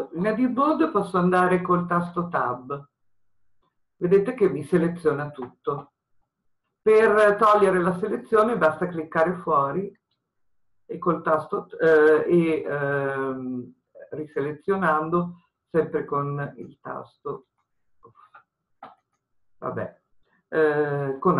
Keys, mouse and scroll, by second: 3.0 Tab, 8.9 click, 21.1 a.